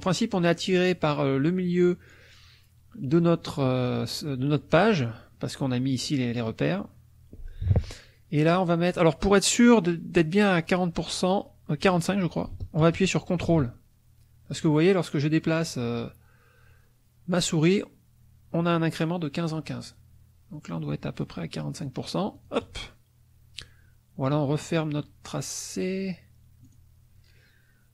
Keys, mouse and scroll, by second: 22.4 ctrl+click, 26.6 click.